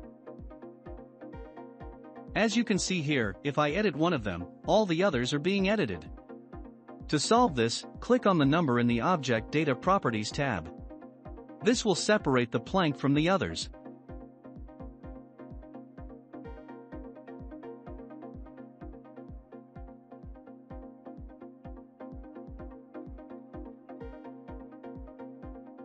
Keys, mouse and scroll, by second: 0.3 Tab, 0.9-4.5 drag, 4.5 scroll down 2, 5.5 Tab, 8.8 click, 10.3-11.7 drag, 12.1 Tab, 12.4 scroll up 2, 13.1 click, 19.8 Tab, 20.5 scroll down 1, 21.4 shift+d.